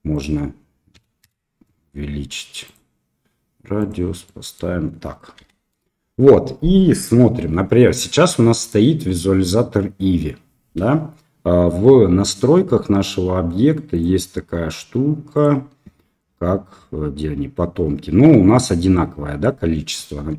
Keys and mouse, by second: 0.1-1.6 drag, 4.2-4.5 middle drag, 5.3 KP_0.